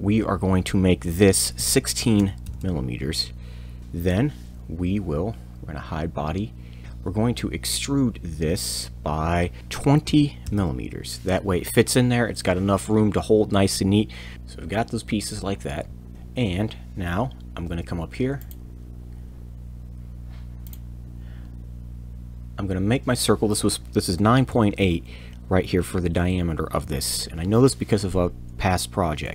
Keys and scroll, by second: 1.5 1, 2.2 6, 2.4 m, 4.1 e, 9.8 ctrl+shift+2, 10.1 0, 10.4 m, 14.3 Return, 17.7 shift+c, 24.8 8.